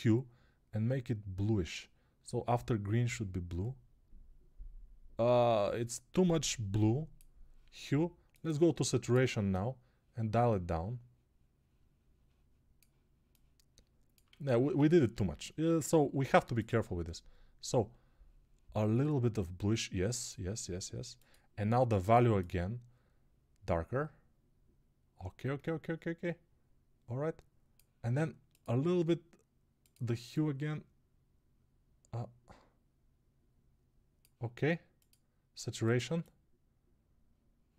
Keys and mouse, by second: 14.2 ctrl+z.